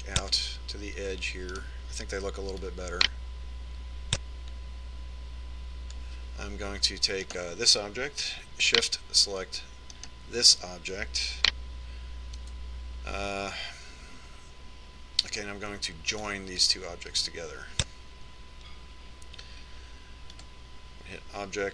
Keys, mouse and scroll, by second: 0.1-1.7 drag, 3.0-4.7 right drag, 4.0-5.7 drag, 8.7-10.4 right drag, 11.4-13.2 right drag, 13.8 j, 17.7-19.4 drag.